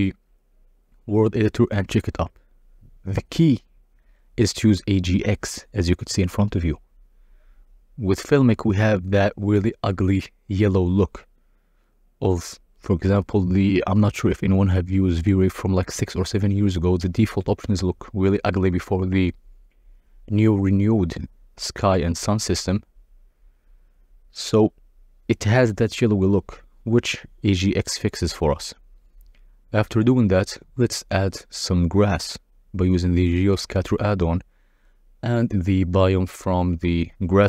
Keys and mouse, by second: 0.0 click, 0.8 click, 2.6-3.8 drag, 6.0-7.3 drag, 8.1-9.0 drag, 16.7-18.2 drag, 21.9 click, 23.3-24.9 drag, 25.6 click, 25.9 z, 26.5 click, 27.1 ctrl+a, 30.0 click, 32.7 click, 35.2 click, 35.7 click.